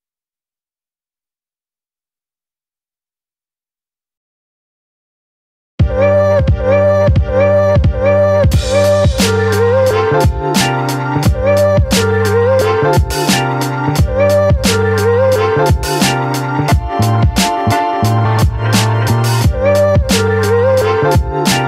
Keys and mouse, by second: 0.2 b, 1.1 middle click, 1.7 middle click, 2.4 shift+middle click, 3.3 b, 4.5 b, 5.3 middle click, 5.7 shift+middle click, 6.3-7.3 shift+middle drag, 7.4 shift+middle click, 11.3-11.8 ], 14.2 middle click, 15.1 right click, 15.6 middle click, 15.9 middle click, 17.5-18.7 middle drag, 18.8 middle click, 19.3 middle click, 19.6 middle click, 20.0 click, 21.2 click.